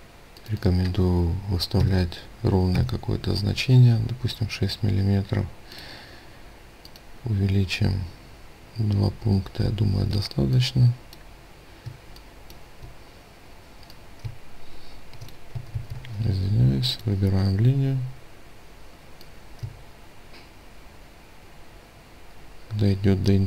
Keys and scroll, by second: 2.1 Return, 9.5 ctrl+space, 15.2 ctrl+z.